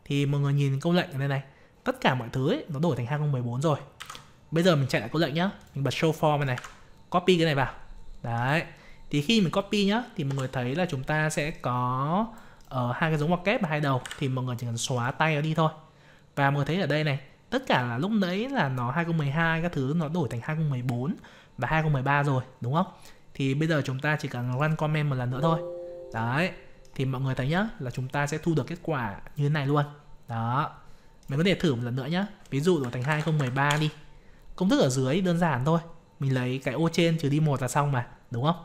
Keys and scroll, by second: 4.0 ctrl+c, 6.5 ctrl+v.